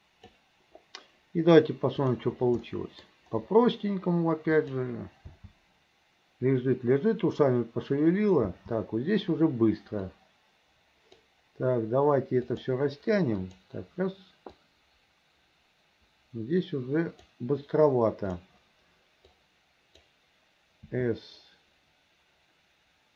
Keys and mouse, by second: 2.1 click, 2.7 middle click, 4.7 click, 5.4 space, 8.6 space, 10.2-11.3 drag, 12.6 click, 13.5 click, 14.7-17.4 drag, 19.4 click, 21.0 s.